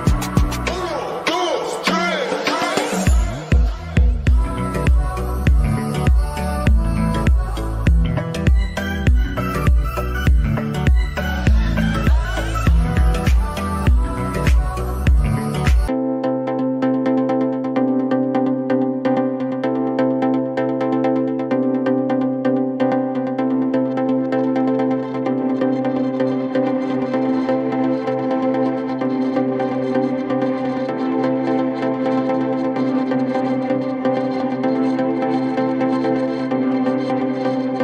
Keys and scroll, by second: 17.5 shift+F2, 21.3 F3, 23.1 F3.